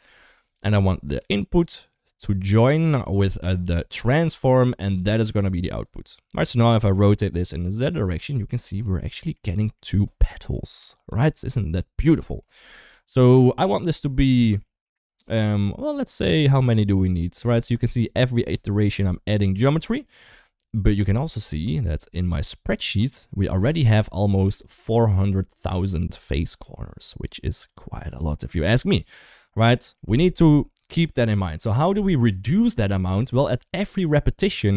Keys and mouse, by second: 0.8 shift+middle click, 1.4-2.0 drag, 2.8 click, 3.1-4.1 drag, 5.0 click, 5.2 click, 7.2 click, 8.7-9.1 middle drag, 9.4 middle drag, 10.1 middle drag, 11.0 click, 12.3 shift+middle click, 14.3 shift+middle click, 16.1 click, 16.3 click, 18.4 click, 20.2 click, 22.5 click, 27.5 click, 28.7 click, 29.4-29.7 middle drag, 31.7 middle click, 32.1 click, 33.1 shift+middle click.